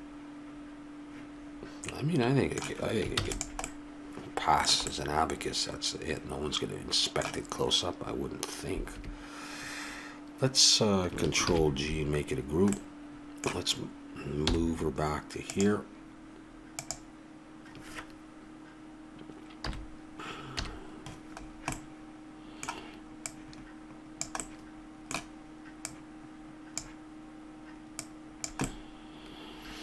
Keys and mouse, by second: 1.9-3.7 middle drag, 3.2 ctrl+s, 6.9 middle click, 9.0 a, 11.5 ctrl+g, 14.4 m, 16.8-18.6 drag, 19.6 KP_1, 20.6 KP_3, 21.8 middle click, 24.4-26.8 middle drag, 27.5 click, 28.0 click, 28.7-29.8 middle drag.